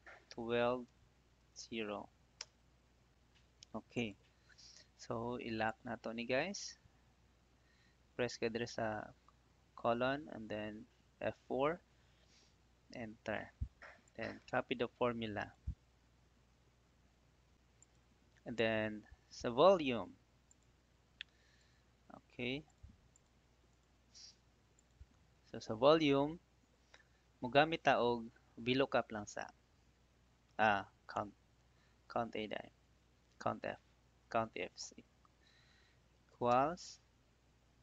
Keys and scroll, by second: 2.3 Return, 8.7 F4, 11.6 Return, 16.3 ctrl+d, 36.4 =.